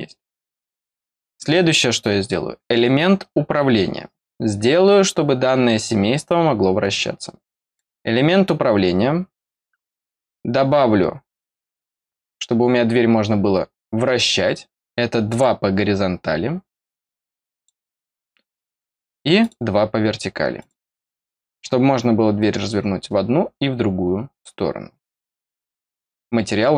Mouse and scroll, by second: 0.5 click, 7.6 click, 15.2 click, 17.5 click, 19.3 click, 20.5 click, 26.0 middle click.